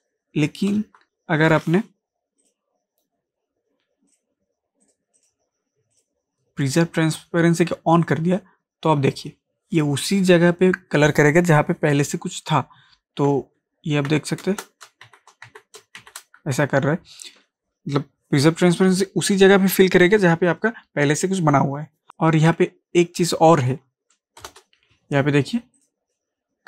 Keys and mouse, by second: 2.4 click, 13.6 ctrl+Num_Lock, 13.6 click, 14.1 ctrl+z, 15.0 ctrl+shift+z, 16.0 z, 24.1 ctrl+z, 25.8 click.